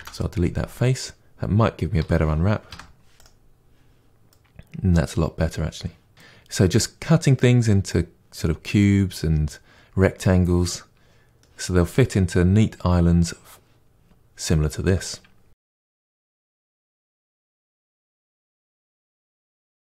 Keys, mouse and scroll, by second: 0.9 Delete, 2.0 a, 3.1 u, 6.1-15.6 middle drag, 15.6 KP_Divide, 16.2 shift+middle click, 16.5 Tab, 16.7 shift+middle click, 16.8 click, 17.0 KP_Divide, 17.1 Tab, 17.2 middle click, 17.5 2, 17.6 click, 18.0 ctrl+e, 19.1 Tab, 19.2 Tab, 19.4 a, 19.5 u, 19.6 Tab, 19.8 KP_Divide.